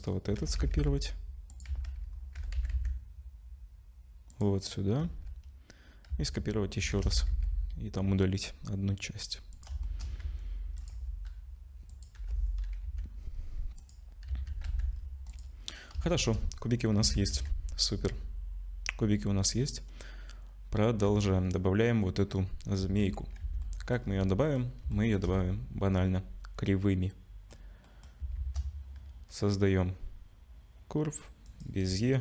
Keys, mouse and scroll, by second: 0.4 shift+d, 1.7 z, 2.1 scroll up 2, 2.4 g, 5.0 z, 6.1 z, 6.9 shift+d, 9.8 shift+middle click, 10.2 Tab, 10.8 click, 11.9 click, 12.2 l, 12.9 x, 14.3 z, 14.7 Tab, 14.9 scroll down 5, 15.3 click, 15.6 scroll down 1, 16.1 shift+middle click, 16.5 scroll up 2, 17.0 ctrl+s, 17.3 z, 22.8 z, 23.6 ctrl+s, 23.6 middle click, 24.0-24.8 scroll down 3, 24.5 middle click, 24.9 shift+middle click, 25.3 middle click, 27.9 middle click, 28.4 shift+a.